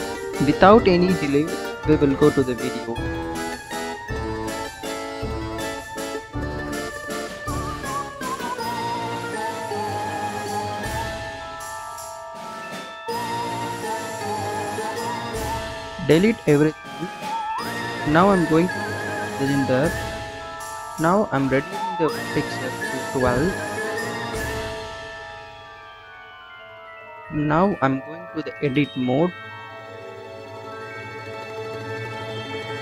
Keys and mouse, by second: 15.7 a, 16.5 Delete, 17.7 shift+a, 21.3 click, 22.5-24.6 drag, 28.7 Tab, 30.1 click.